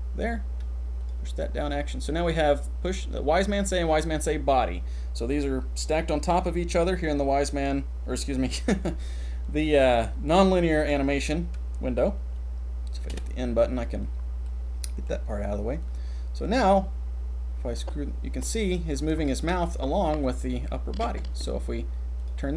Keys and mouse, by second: 1.0 click, 13.1 n, 14.4 middle click, 15.8-16.8 drag, 17.7-18.5 drag, 19.2 shift+click, 19.8-21.3 drag, 21.5-22.2 drag, 22.3-22.5 drag.